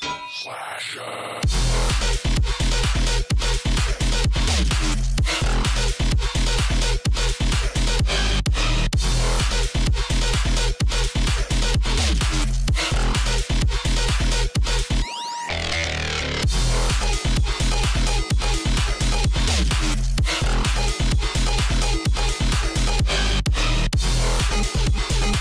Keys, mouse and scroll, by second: 0.8-1.2 alt+scroll up 1, 1.2 click, 2.4-3.2 alt+scroll up 1, 3.5-6.1 drag, 7.0 scroll down 1, 7.6 alt+scroll up 1, 7.8-10.6 drag, 10.6 space, 13.8 click, 16.1 l, 16.4 click, 18.0 ctrl+[, 18.5 click, 18.8 alt+scroll up 1, 19.1 click, 19.8 Left, 20.6 click, 20.9 alt+scroll up 1, 21.2-22.9 drag, 23.6 alt+scroll down 1, 24.1 click, 24.1 space, 24.8 alt+scroll up 1, 25.1-25.4 drag.